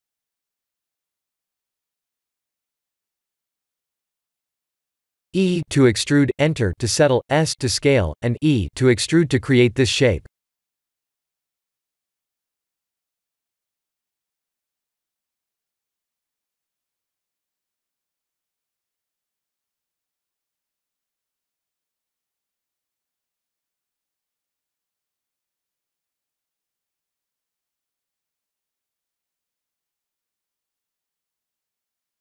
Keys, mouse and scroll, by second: 1.5 e, 2.8 s, 4.1 e, 7.2 e, 7.8 s, 9.4 e, 10.9 ctrl+z, 11.8 ctrl+z, 13.8 s, 15.2 e, 16.2 ctrl+z, 16.8 s, 17.6 e, 18.4 ctrl+z, 18.9 middle click, 19.0 middle click, 19.2 middle click, 19.7 ctrl+z, 20.1 ctrl+z, 21.2 e, 22.3 ctrl+z, 22.7 s, 24.7 KP_2, 25.7 KP_1, 26.3 e, 30.7 e, 31.3 s.